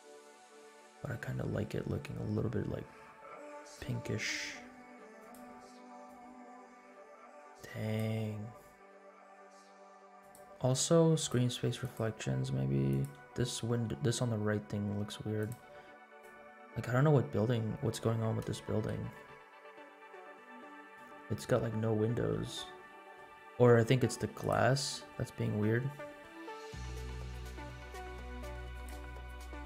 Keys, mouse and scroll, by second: 5.1 click, 10.1 click, 11.1 click, 11.8 click, 13.1-13.5 drag, 15.5 click, 16.1 click, 18.4 KP_0, 18.8 KP_Decimal, 19.5 scroll up 2, 19.9-20.9 middle drag, 21.2 scroll up 1, 21.5-23.4 middle drag, 24.4 click, 25.6-26.2 scroll up 4, 27.2-28.2 scroll up 13, 28.9 click.